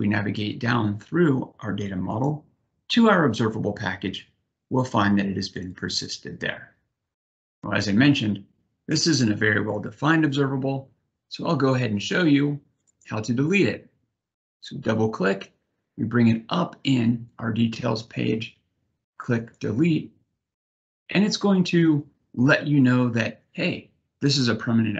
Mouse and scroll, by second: 0.3 click, 1.4 click, 2.7 click, 4.3 middle click, 13.3 click, 20.2 click.